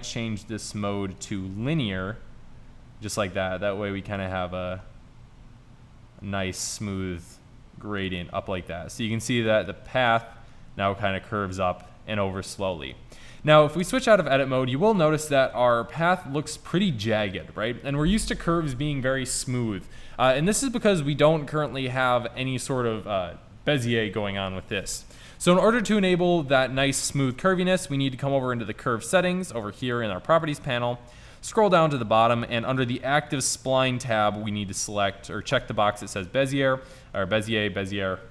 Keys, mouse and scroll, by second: 1.8 g, 8.3-13.0 middle drag, 13.9 Tab, 31.5-35.7 drag, 37.2 middle click.